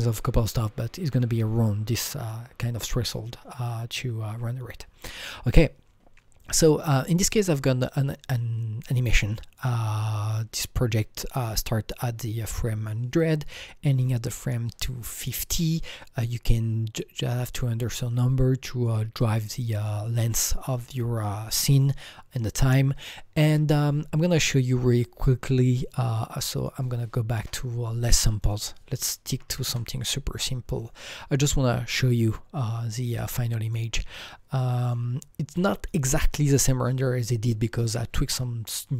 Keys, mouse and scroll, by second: 26.4 click, 26.5 double click, 27.4 KP_0, 28.4 click, 28.5 double click, 29.6 Return, 30.6 Return, 30.6 KP_6, 30.6 KP_1, 30.8 click, 31.4-32.3 scroll up 6, 32.3-33.6 scroll down 5, 33.6 click, 34.2 alt+click, 35.2-38.5 alt+drag.